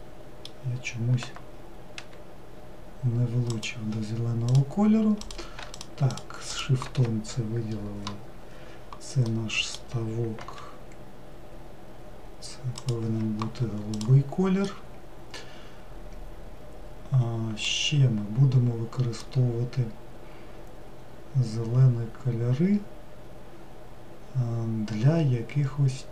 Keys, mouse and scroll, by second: 1.9 g, 4.4 click, 5.2 click, 5.7 shift+click, 6.1 shift+click, 10.3 g, 13.9 click, 14.6-18.0 middle drag, 18.0-19.1 scroll down 2, 19.1-22.1 middle drag.